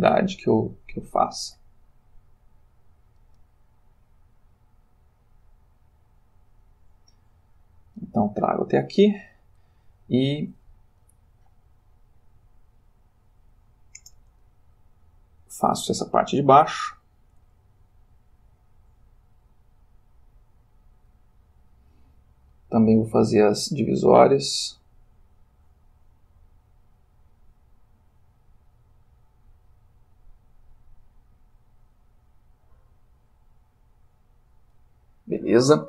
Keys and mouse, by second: 15.7-21.2 drag, 21.2 middle click, 22.2-30.9 drag, 32.0-35.0 drag.